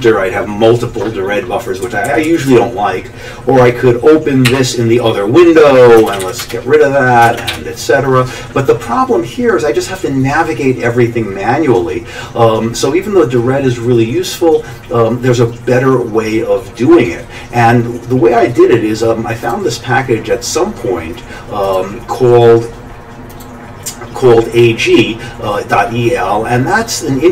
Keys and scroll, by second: 1.8 Down, 2.1 Down, 2.3 Down, 2.5 Down, 4.5 o, 6.1 ctrl+x, 6.2 k, 6.4 Return, 7.3 ctrl+x, 7.5 1.